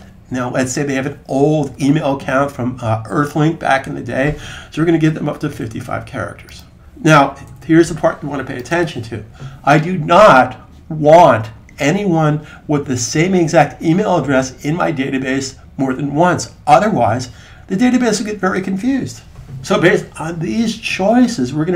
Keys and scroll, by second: 0.1 typing, 5.2 typing, 7.3 typing.